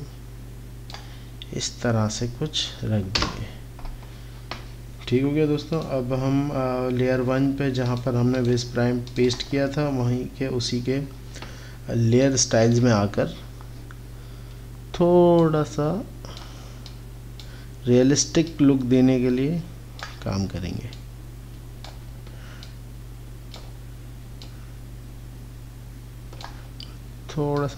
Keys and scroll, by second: 3.3 Return.